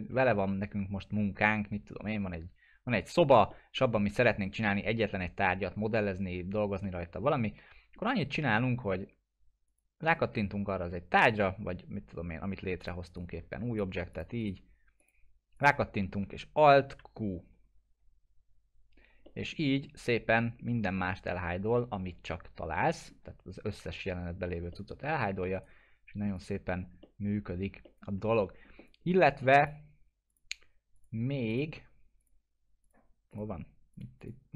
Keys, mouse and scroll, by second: 2.6-3.5 scroll down 1, 3.5 middle click, 3.9-4.5 alt+middle click, 5.2-5.8 alt+middle drag, 7.2-8.2 alt+middle drag, 12.8-13.8 click, 14.4 right click, 15.0 click, 17.2 alt+q, 19.5-20.8 alt+middle drag, 23.5-23.9 scroll down 1, 23.9 scroll up 1, 24.4 scroll down 1, 24.7 middle click, 25.5 right click, 26.3 click, 27.0 middle click, 27.5 scroll down 1, 27.8-28.4 alt+middle drag, 29.6 click.